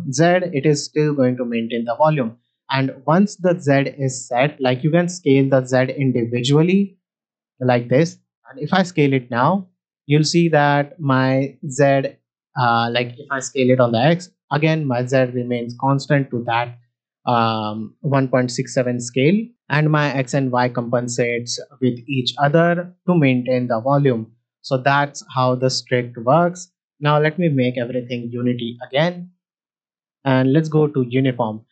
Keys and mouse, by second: 8.5 s, 12.4-13.1 right drag, 13.5 s, 13.6 x, 19.5-21.7 drag, 27.5-29.0 drag, 29.8-31.1 drag.